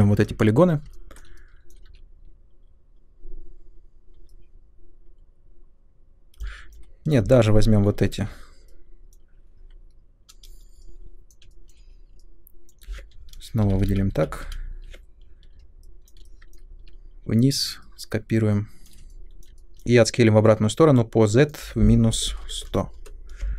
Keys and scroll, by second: 1.9 w, 8.1 3, 13.5 shift+Up, 13.6 shift+Up, 13.7 shift+Up, 13.9 shift+Up, 14.1 shift+Up, 14.4 shift+Up, 16.8 w, 21.8-23.0 typing.